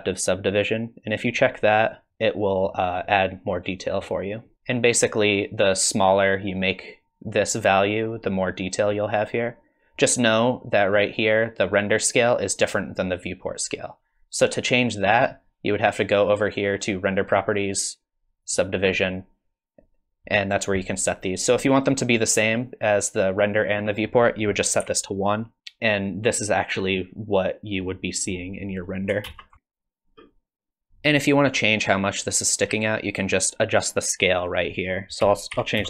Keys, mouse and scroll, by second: 1.8 click, 2.1 middle click, 3.0 middle click, 17.1 click, 18.4 click, 18.9-19.7 scroll down 1, 19.7-21.4 scroll down 1, 22.1 click, 27.9 middle click, 29.3 ctrl+space, 29.5 scroll down 2, 30.9 click, 34.5 click.